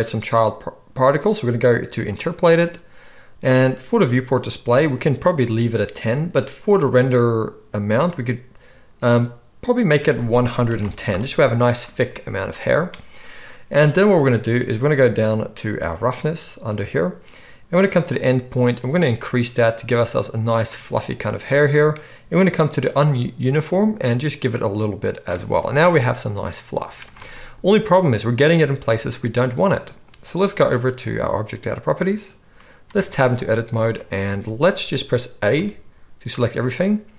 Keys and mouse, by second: 2.2-9.7 middle drag, 9.7-31.7 drag, 10.7 1, 31.7-37.1 middle drag, 33.0 Tab, 34.2 alt+a, 35.5 a.